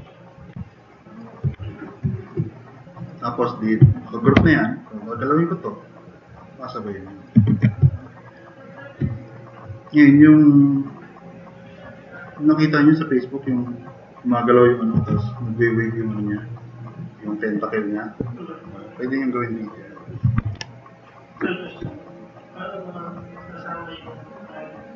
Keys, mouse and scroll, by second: 0.7-1.2 drag, 4.4 r, 5.5-7.1 drag, 7.5 ctrl+z, 8.0-8.4 drag, 9.1 click, 20.3 click, 21.0 click.